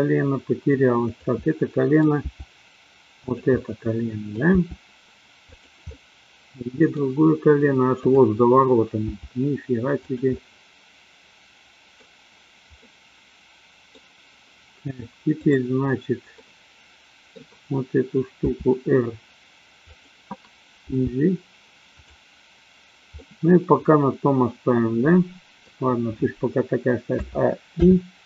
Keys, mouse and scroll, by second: 1.4 middle click, 2.2 g, 3.3 click, 3.6 scroll up 1, 3.7 middle click, 5.6 drag, 5.6 g, 5.9-6.9 middle drag, 8.1 click, 9.1 g, 10.1 click, 10.3-11.9 middle drag, 12.8-13.9 middle drag, 15.3 click, 16.4-17.3 middle drag, 18.3 r, 19.9 click, 20.8 g, 23.2-25.7 middle drag, 27.1 a, 27.7 i.